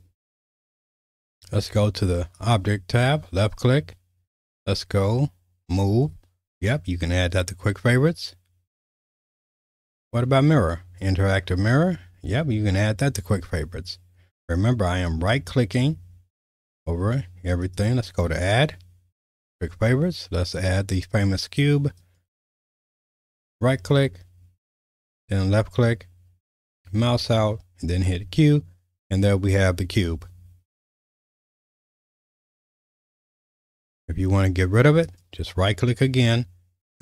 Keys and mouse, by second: 2.4-15.0 drag, 17.6-26.5 drag, 27.9 q, 33.1 q.